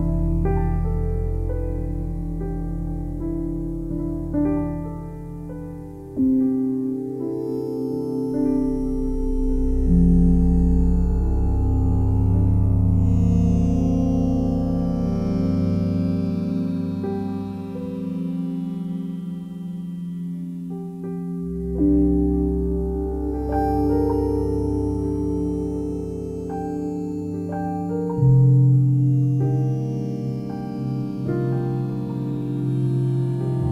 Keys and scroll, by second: 10.3 F4, 14.0 i.